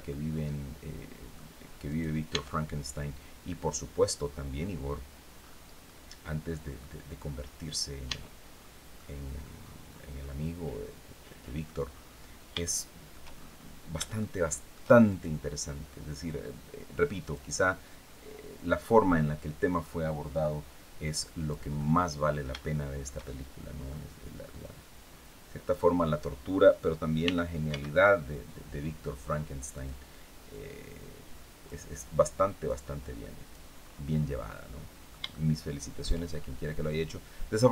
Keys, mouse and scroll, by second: 1.5 right click, 2.0 Tab, 4.2-4.8 scroll down 4, 5.0-5.4 scroll up 2, 5.5-6.6 drag, 6.9-7.3 scroll up 2, 7.8 Tab, 8.2 scroll down 2, 8.6 click, 9.3 scroll down 2, 9.5 middle click, 9.9-11.5 middle drag, 11.6-12.1 scroll up 2, 12.3 shift+middle click, 13.0-13.5 shift+scroll up 3, 13.9 shift+middle click, 14.8 shift+right click, 15.9-17.2 drag, 18.2-21.4 drag, 22.2 shift+middle click, 22.3 shift+middle click, 23.3 middle click, 24.3-25.6 drag, 26.9 r, 27.4 x, 29.4 click, 30.2-31.5 drag, 32.3-33.4 drag, 33.5-34.1 scroll up 1, 34.2 middle click, 36.0-36.4 shift+scroll up 3, 37.4-37.7 drag.